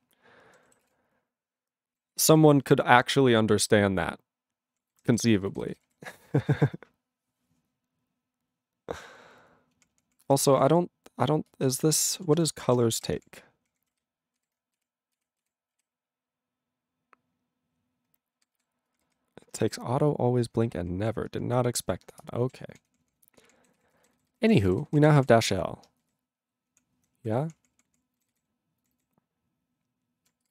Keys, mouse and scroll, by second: 0.8 ctrl+s, 0.9-2.0 ctrl+n, 2.3 ctrl+s, 2.6 ctrl+n, 3.1-4.7 ctrl+p, 4.9 ctrl+n, 5.1 ctrl+n, 5.2 ctrl+n, 5.4 ctrl+n, 5.5 ctrl+n, 5.7 ctrl+space, 5.7 ctrl+e, 5.8 ctrl+g, 6.3 ctrl+s, 9.8 ctrl+p, 10.0 ctrl+p, 10.3 ctrl+n, 10.4 ctrl+a, 10.4 ctrl+n, 10.6 ctrl+e, 10.7 ctrl+n, 11.4 ctrl+space, 11.9 ctrl+alt+b, 12.4 ctrl+g, 12.7-14.9 typing, 15.2 ctrl+s, 15.8 ctrl+s, 18.1 ctrl+r, 18.4 ctrl+s, 18.6 ctrl+s, 18.9 ctrl+r, 19.1 ctrl+r, 20.8 ctrl+r, 21.7 ctrl+r, 21.8 ctrl+r, 22.3 Return, 22.5 ctrl+a, 22.8 ctrl+p, 22.9 ctrl+p, 23.1 ctrl+p, 23.2 ctrl+p, 23.3 ctrl+p, 23.8 ctrl+s, 23.9 ctrl+n, 24.1 ctrl+e, 24.2 ctrl+n, 24.3 ctrl+n, 24.4 ctrl+a, 24.6 ctrl+e, 24.7 ctrl+g, 24.9 ctrl+n, 25.0 ctrl+a, 25.1 ctrl+space, 25.2 ctrl+e, 25.2 ctrl+g, 25.4 ctrl+a, 26.1 alt+n, 26.7 alt+p, 27.0 alt+n, 27.2 alt+p, 27.5 alt+p, 27.6 alt+p, 27.8 alt+p, 27.9 alt+p, 28.2 alt+n, 28.3 alt+n, 28.8 alt+n, 29.0 alt+n.